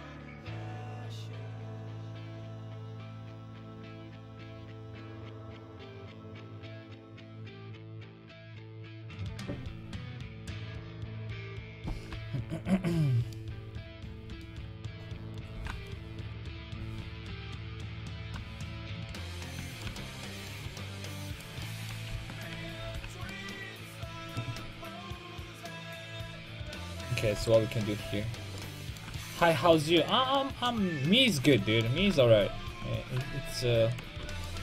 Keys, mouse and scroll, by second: 13.4-15.4 middle drag, 15.4-18.7 right drag, 15.5 g, 20.0-21.4 drag, 21.9 right click, 22.3 ctrl+x, 22.6 a, 22.9 ctrl+t, 23.4 a, 27.3 KP_5, 27.4 KP_1, 31.3-34.0 right drag, 32.0 g.